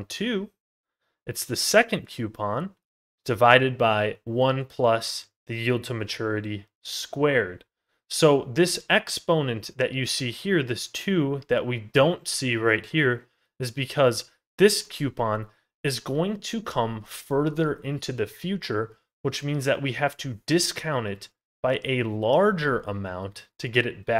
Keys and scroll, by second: 11.1 ctrl+z, 14.7 ctrl+z.